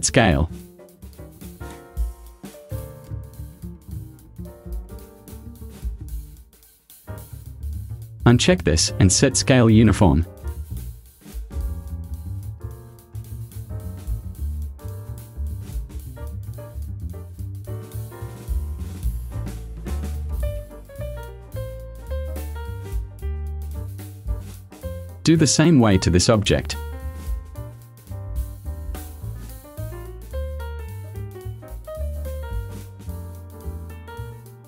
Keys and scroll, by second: 27.0 ctrl+c, 33.3 i.